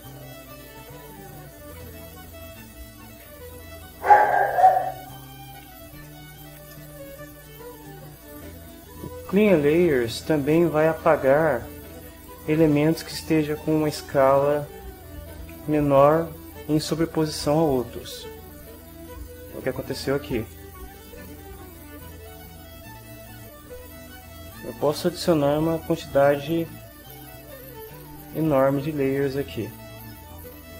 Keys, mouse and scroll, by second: 2.7 right click, 3.8-5.2 right drag, 6.0 ctrl+middle click, 6.8 ctrl+shift+middle click, 18.0 click, 23.6 click, 25.1 click, 26.2 click, 27.3 click, 28.5 click, 29.7 click.